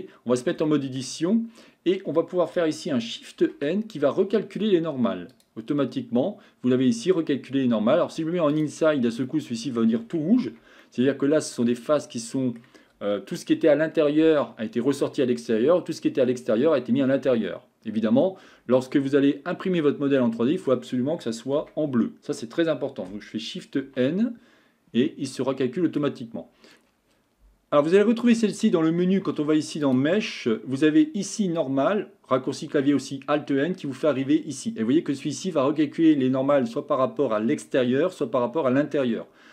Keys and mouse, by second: 0.7 shift+middle click, 3.6 shift+n, 8.9 click, 9.3 middle click, 10.5 Tab, 10.8-12.6 middle drag, 19.0-20.7 middle drag, 21.7 Tab, 24.0 shift+n, 25.3 middle click, 29.8-39.5 drag.